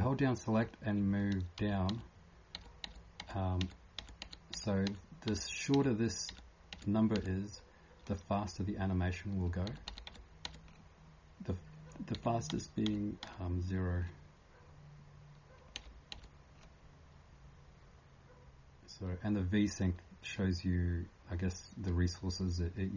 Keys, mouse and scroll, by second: 0.6 k, 1.9-4.9 d, 9.5 n.